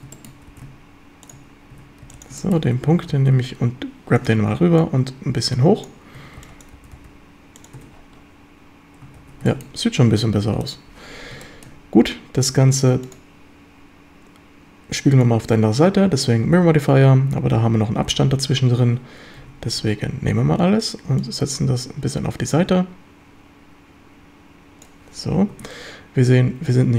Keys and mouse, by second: 0.2 shift+click, 0.5 g, 1.3 shift+click, 1.7 a, 2.1 b, 2.5 shift+click, 2.7 g, 3.1 x, 4.2 ctrl+click, 4.8-5.9 drag, 6.2 a, 6.4 b, 6.8 g, 7.0 g, 7.6 click, 7.8 Tab, 9.2 ctrl+s, 9.5 shift+drag, 10.7 click, 11.5 shift+drag, 13.1-15.3 drag, 16.5 z, 18.1 z, 19.4 Tab, 19.8 a, 20.3 a, 21.2-24.9 drag, 25.5 Tab.